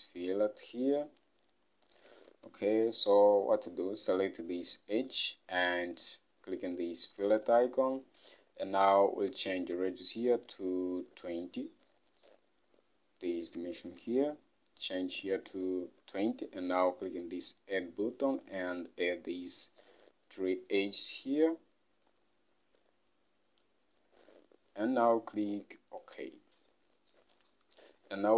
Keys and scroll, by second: 9.7 ctrl+Tab, 15.9-16.8 typing, 27.8 Home.